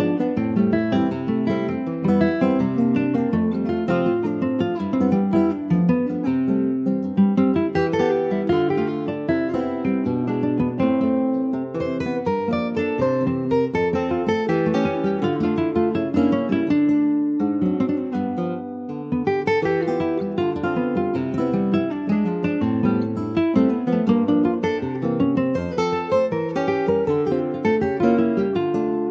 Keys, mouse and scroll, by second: 0.3 scroll down 2, 0.5 middle click, 0.9-1.5 scroll up 2, 1.7 scroll up 1, 2.4 shift+middle click, 3.6 scroll up 2, 5.6-8.0 drag, 8.0 KP_9, 8.7-9.0 scroll down 4, 9.8 click, 10.1-11.3 scroll down 2, 11.3-13.7 shift+middle drag, 13.7 click, 15.0 click, 15.8 click, 19.0 click, 19.7-21.6 shift+middle drag, 21.6-22.9 drag, 23.1-23.4 scroll down 2, 23.4 middle click, 24.4-26.2 scroll up 6, 24.7 shift+middle click, 26.2-29.1 middle drag.